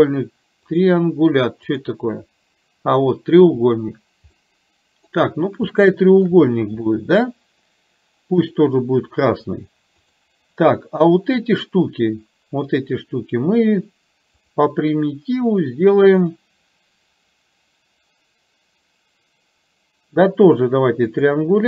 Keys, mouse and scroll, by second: 1.7 click, 4.3 middle click, 5.8-6.3 shift+middle drag, 7.1 middle click, 8.4 click, 10.1 click, 14.6-21.4 drag.